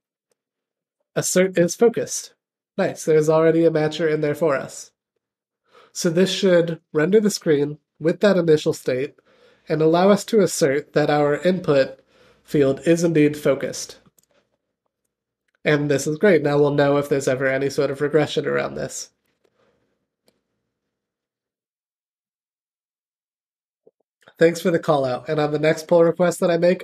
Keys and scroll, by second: 1.3 Return.